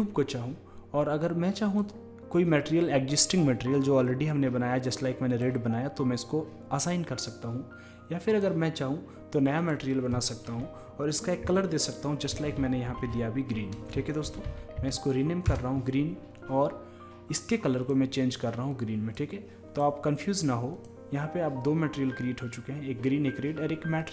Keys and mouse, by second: 1.7-3.6 drag, 8.3-11.3 drag, 13.1 a, 14.0 BackSpace, 14.5 e, 17.8-19.8 drag, 20.8-22.7 drag.